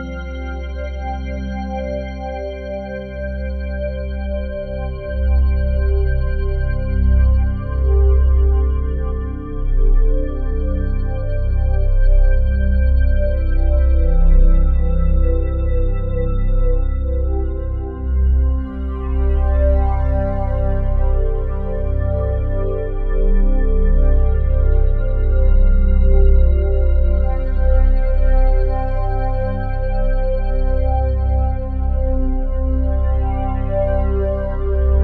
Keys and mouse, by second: 1.3 click, 2.5 click, 4.6 typing, 5.0 Return, 5.9 alt+click, 7.4 7, 8.1 alt+shift+click, 9.7 click, 9.7 typing, 10.3 ctrl+alt+click, 10.9-12.4 ctrl+alt+drag, 13.6 shift+click, 14.6-15.4 typing, 19.3-23.9 alt+drag, 23.9 g, 24.4 Escape, 25.2 click, 25.6 click, 26.5 g, 26.9 Escape, 28.1 7, 28.7-31.3 ctrl+alt+drag, 31.3 n, 32.3 click, 33.2 click, 34.8-35.0 typing.